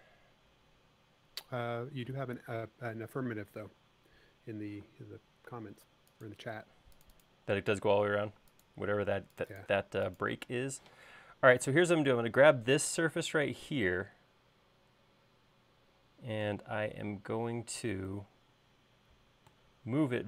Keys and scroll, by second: 5.0 p, 11.1 m.